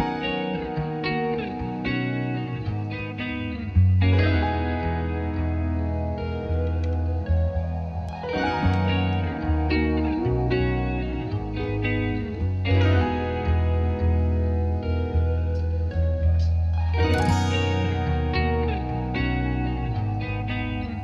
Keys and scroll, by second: 2.5-3.6 typing, 3.9 Return.